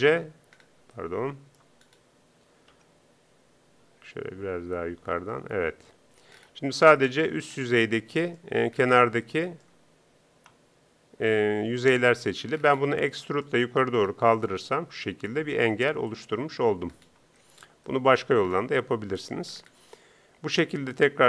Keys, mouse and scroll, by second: 14.6 e, 16.5 Tab.